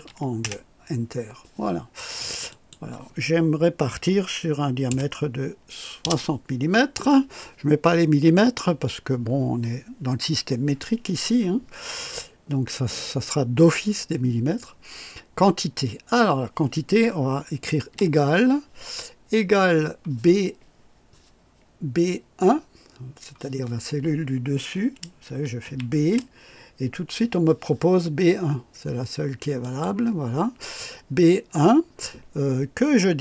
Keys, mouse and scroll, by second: 0.0-0.4 typing, 1.5-2.3 typing, 2.5 click, 3.6-6.5 typing, 17.9 =, 25.6 shift+b, 29.6 click.